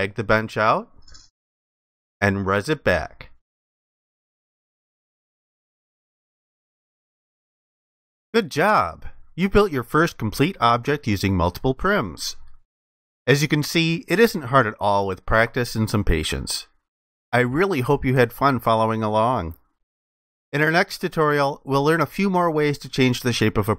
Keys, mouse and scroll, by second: 2.3 alt+click.